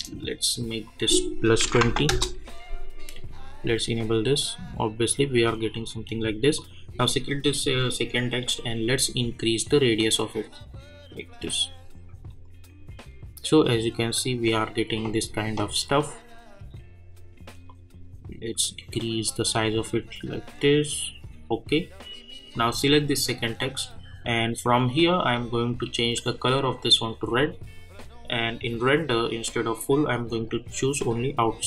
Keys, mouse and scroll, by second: 2.1 Return, 3.6-12.3 drag, 17.6-22.5 drag, 25.1 click, 28.8 click.